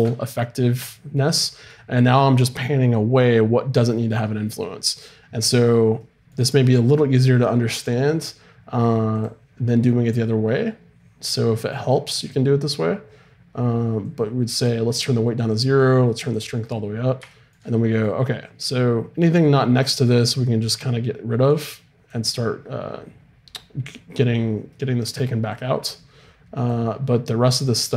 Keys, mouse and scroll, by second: 0.9 middle click, 5.5-9.2 middle drag, 9.2-17.7 drag, 16.7 middle click, 20.3-24.1 drag, 24.7 middle click, 25.5-27.4 drag.